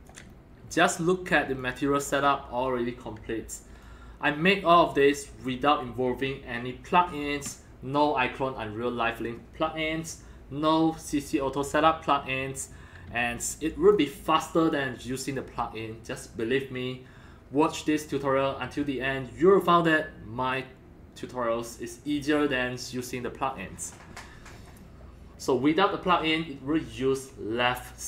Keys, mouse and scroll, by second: 0.3 scroll up 3, 0.7 scroll down 2, 1.6 alt+click, 3.8 alt+click, 5.0-5.5 scroll up 4, 5.5 scroll down 5, 8.8 scroll, 13.1 alt+middle click, 13.4 alt+click, 13.9 alt+click, 24.8-25.2 scroll up 3, 25.3 scroll down 1.